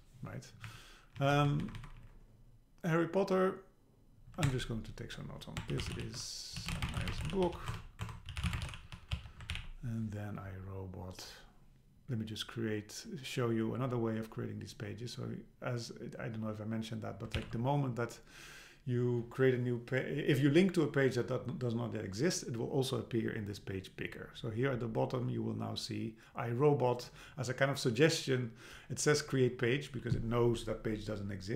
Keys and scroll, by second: 0.7 Up, 1.2 Left, 4.5 super+Return, 7.7 alt+BackSpace, 9.5 alt+h, 17.4 super+k.